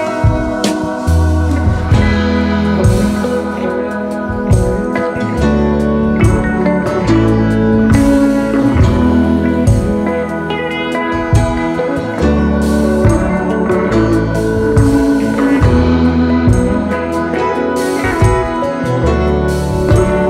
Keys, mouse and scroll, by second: 0.0-0.1 typing, 1.0-1.3 alt+scroll down 2, 1.3-2.4 space, 7.9 double click, 8.9 double click, 9.9 alt+scroll down 1, 10.2 space, 10.7 space, 12.0-12.3 alt+scroll up 3, 12.4 space, 16.7 alt+scroll up 2, 16.9 space.